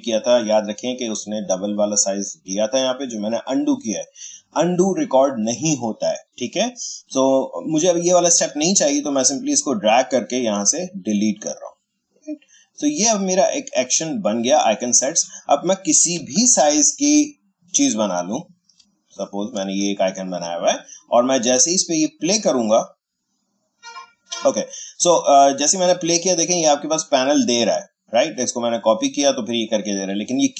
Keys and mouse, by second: 9.4-16.1 drag, 16.1 Delete, 17.3-19.1 drag, 19.1-22.0 shift+drag, 25.7-28.4 drag.